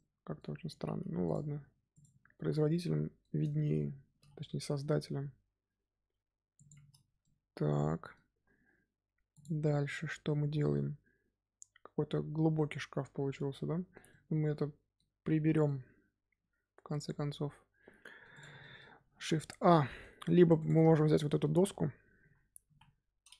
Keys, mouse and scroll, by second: 0.6 Tab, 0.8 z, 1.2 click, 1.8 click, 2.3 z, 2.6-3.7 middle drag, 3.7-4.0 scroll up 2, 4.0 g, 6.6 scroll up 1, 6.8 scroll down 4, 7.0 Tab, 7.1-10.3 middle drag, 10.7-13.7 middle drag, 14.0-18.3 middle drag, 18.3 click, 18.5-19.1 middle drag, 19.1 shift+a, 20.5 click, 20.9-21.5 shift+middle drag, 21.5-22.1 scroll up 2, 22.1 KP_1.